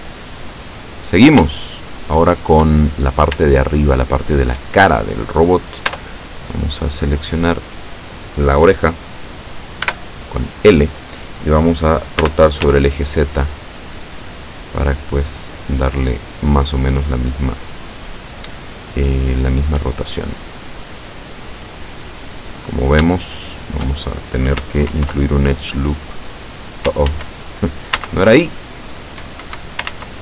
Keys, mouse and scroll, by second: 0.9 right click, 1.7-2.9 shift+middle drag, 2.9 shift+scroll up 1, 3.5 shift+scroll up 1, 3.6-5.1 shift+middle drag, 5.9 Tab, 7.4 right click, 9.9 l, 12.2 r, 12.7 z, 16.4 click, 19.0-20.0 drag, 20.9-22.5 drag, 22.6-23.0 scroll up 2, 23.2 shift+middle click, 24.9 ctrl+r, 26.3 click, 27.1 ctrl+z, 28.0 ctrl+z, 29.5 Escape, 30.0 ctrl+z.